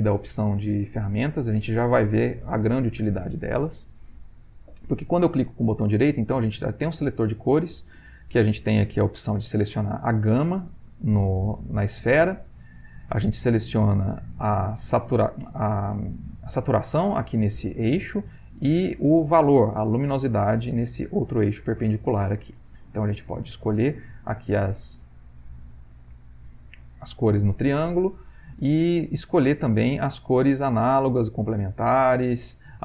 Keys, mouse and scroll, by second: 6.6-8.3 drag, 8.8-13.1 drag, 13.6 click, 22.6-27.3 drag, 28.1 click.